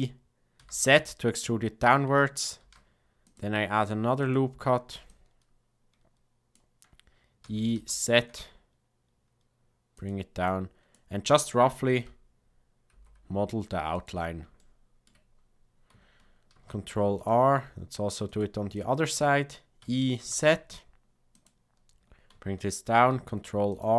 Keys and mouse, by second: 2.6 ctrl+r, 5.0-6.5 drag, 7.4 e, 10.5 click, 11.9 g, 14.5 shift+middle click, 16.5 ctrl+r, 18.9 click, 19.8 e, 22.9 ctrl+r.